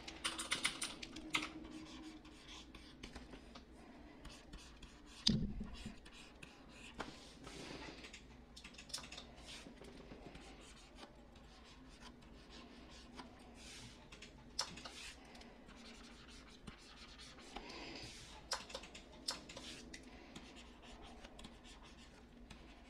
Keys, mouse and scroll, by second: 0.2-0.7 typing.